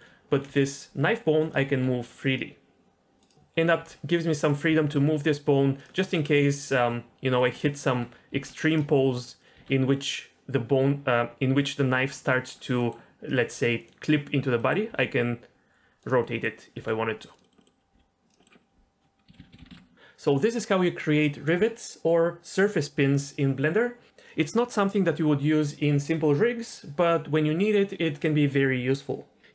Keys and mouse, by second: 0.5 r, 1.6 r, 1.7 r, 3.8 r, 4.7 r, 4.8 r, 6.0 middle click, 6.6 click, 6.8 g, 7.3 click, 7.7 middle click, 8.3 r, 8.7 drag, 9.4 click, 9.5 r, 12.2 click, 12.8 middle click, 14.6 middle click, 14.9 r, 16.2 middle click, 16.7 r, 17.4 middle click, 17.6 middle click, 17.9 r, 18.4 middle click, 19.3 a, 19.5 alt+g, 19.6 alt+r, 19.7 alt+s.